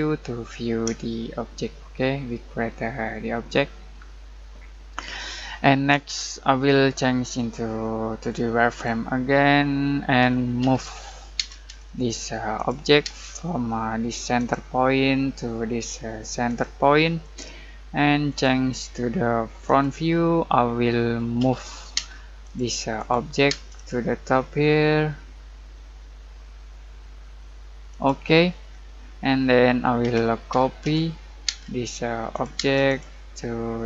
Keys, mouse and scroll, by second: 0.6 scroll down 1, 1.0-7.3 shift+middle drag, 7.3 click, 10.6 m, 11.3 space, 12.0 click, 13.0 space, 14.3 click, 20.6 scroll down 1, 20.9 middle click, 21.4 m, 21.9 space, 22.4 click, 23.5 space, 23.7 click, 27.9 click, 28.7-29.0 scroll down 1, 29.0 middle click, 30.0-31.4 typing, 31.8 click, 32.6 space, 32.8 click.